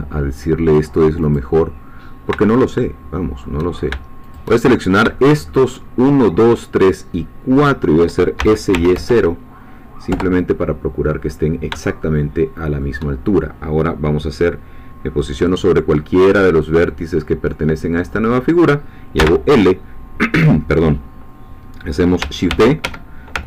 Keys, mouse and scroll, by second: 1.2 click, 2.7 shift+middle click, 4.3 shift+click, 4.7-5.0 shift+scroll down 3, 5.2 shift+middle click, 7.6 shift+click, 8.4 shift+s, 8.7 shift+y, 8.9 shift+0, 10.1 Return, 12.0 shift+middle click, 19.2 l, 22.5 shift+d, 22.8 shift+Escape, 23.3 ctrl+shift+Escape.